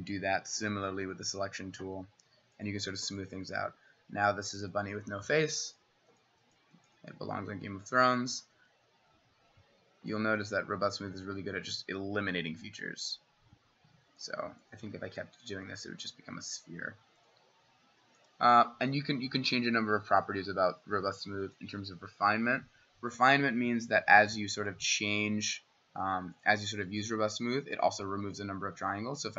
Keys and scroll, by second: 23.7 w.